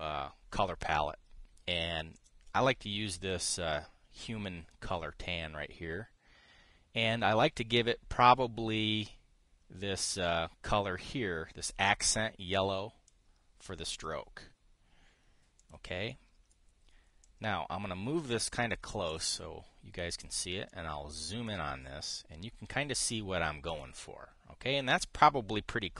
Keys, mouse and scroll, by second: 2.9 click, 13.8-14.8 drag, 16.3 drag, 16.8-17.3 drag, 17.9-19.6 drag, 19.8 click, 20.8 click, 21.4 click, 24.4 click.